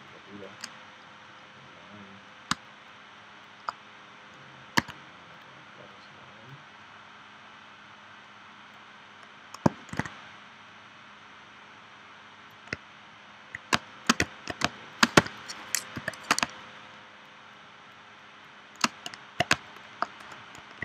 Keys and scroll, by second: 2.5 space, 4.8 a, 9.9 shift+c, 13.7-16.4 typing, 19.5 space.